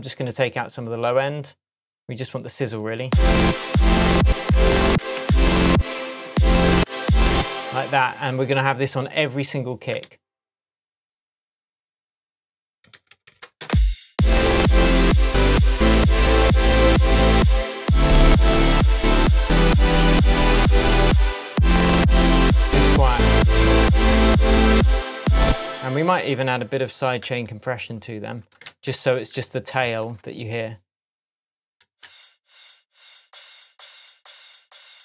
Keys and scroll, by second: 3.0 space, 10.0 super+d, 13.0 super+d, 13.6 super+space, 14.5 space, 25.4 space, 27.2 super+c, 28.7 super+v, 31.8 space.